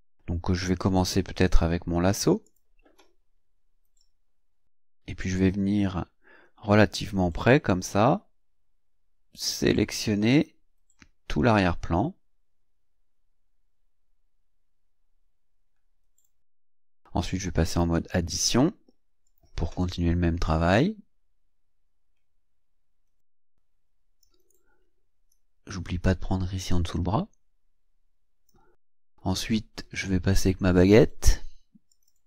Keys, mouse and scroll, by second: 2.5 click, 4.0-16.4 drag, 17.7 click, 19.3 click, 20.5-24.4 drag, 25.3-28.7 drag, 30.8 click, 31.9 click.